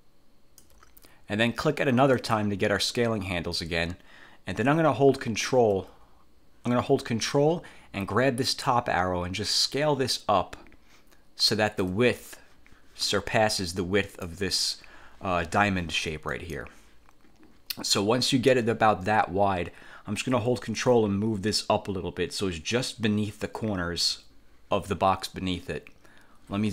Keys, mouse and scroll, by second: 2.3 click, 8.8-12.1 ctrl+drag, 14.3 click, 16.5 click, 20.9-24.3 ctrl+drag.